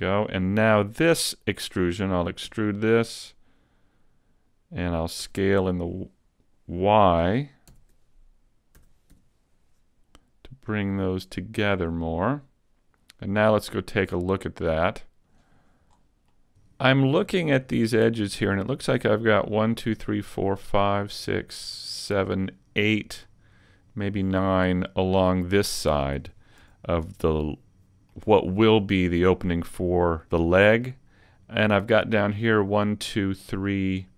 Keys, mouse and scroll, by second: 2.5 e, 2.9 click, 5.3 s, 6.5 right click, 7.7 ctrl+,, 8.8 s, 11.9 click, 13.3 click, 14.7 click, 15.9-16.3 scroll up 3, 16.3 middle click, 16.7 scroll down 2, 17.7 right click, 18.1 middle click, 21.6 middle click, 23.3 middle click, 24.3 middle click, 26.7 a, 27.0-27.6 scroll up 2, 27.4 middle click, 30.5 middle click, 33.7 middle click.